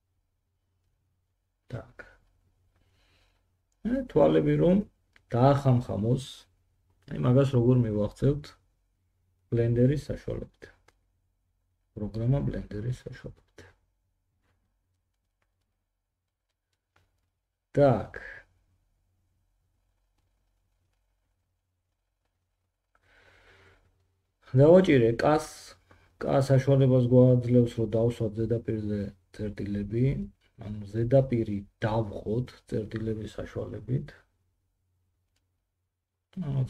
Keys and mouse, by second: 1.8-36.6 middle drag, 23.3 Tab, 25.0 k.